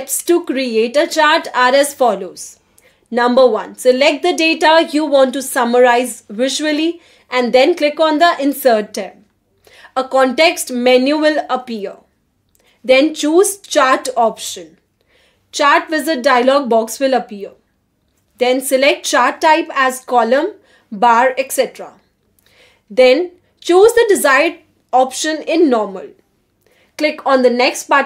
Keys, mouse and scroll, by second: 4.4 drag, 8.3-11.6 drag, 14.0 click, 16.0 middle click, 19.9 click, 22.4 click, 24.7 click.